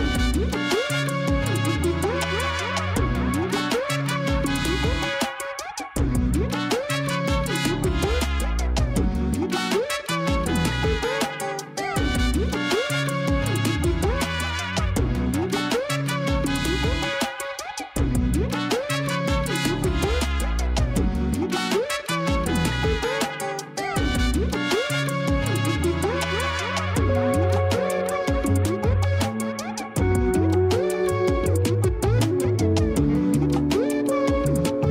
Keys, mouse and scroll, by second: 1.7-2.3 scroll up 3, 4.0 click, 5.5 Tab, 7.5 l, 8.9 shift+d, 9.8 scroll down 1, 10.5 KP_3, 11.3 scroll up 1, 11.6 r, 13.9 g, 16.2-17.7 middle drag, 17.7 KP_1, 18.2 scroll up 3, 18.5 g, 20.2-21.5 scroll down 3, 21.5-22.4 scroll up 1, 22.4 KP_3, 23.3 r, 24.4 g, 26.0-27.4 middle drag, 27.4 KP_1, 28.0 scroll up 2, 28.3 g, 30.9-31.3 scroll down 2, 31.3-31.7 scroll up 1, 31.7 r, 33.6 KP_1, 33.8 KP_3, 34.5-34.9 scroll up 3.